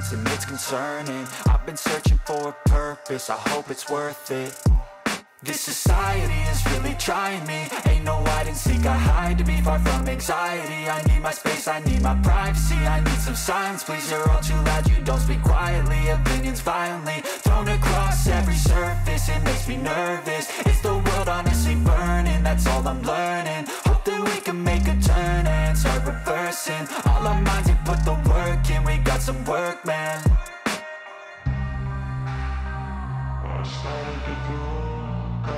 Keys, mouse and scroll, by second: 0.6 shift+right click, 0.9 middle click, 1.8-4.5 drag, 6.2 click, 6.5 click, 6.9 middle click, 6.9 alt+right click, 6.9 scroll down 1, 7.7 click, 7.8-11.3 drag, 12.5 click, 12.7 click, 12.8 click, 13.8 middle click, 14.6-14.9 scroll down 1, 14.9 middle click, 16.1 right click, 16.5 middle click, 17.3 middle click, 17.7 shift+middle click, 18.1 middle click, 19.5 click, 22.8 click, 23.3 middle click, 26.3-26.7 scroll down 2, 26.8 scroll up 1, 27.9 middle click, 28.0 Tab, 28.1 shift+middle click, 28.1 middle click, 28.3 middle click, 28.5 click, 29.1 middle click, 29.1 scroll up 3, 29.2 middle click, 29.3 w, 29.4 middle click, 30.0 middle click, 30.1 Tab, 30.1 middle click, 30.2 right click, 30.3 3, 30.4 scroll up 2, 30.5 middle click, 30.6 shift+right click, 30.6 middle click, 30.8 click, 31.6 middle click, 31.6 Tab, 31.7 middle click, 31.9 Tab, 31.9 scroll down 2, 31.9 middle click, 31.9 a, 32.3 a, 32.4 a, 32.5 middle click, 32.7 click, 33.1 middle click, 33.1 Tab, 33.1 middle click, 33.2 scroll up 3, 33.2 middle drag, 33.4 scroll down 2, 33.4 middle click, 33.8 shift+middle click, 33.9 middle click, 34.2 middle click, 34.5 click, 34.6 scroll down 1, 34.7 middle click.